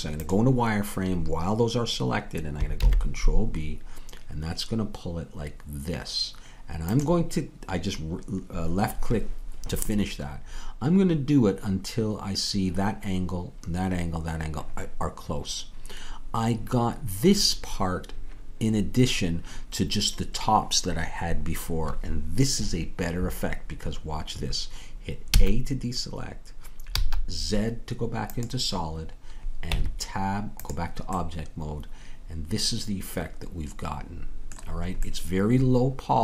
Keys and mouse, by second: 2.8 ctrl+b, 25.3 a, 27.0 z, 29.7 Tab.